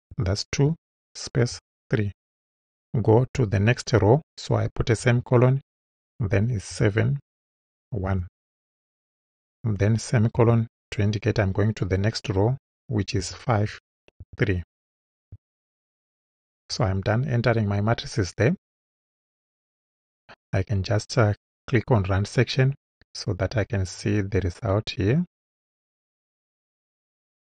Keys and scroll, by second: 0.1 2, 0.6 space, 1.5 3, 5.0 ;, 6.7 7, 7.3 space, 8.1 1, 10.4 ;, 13.2 5, 13.7 space, 14.2 3, 16.6 Right.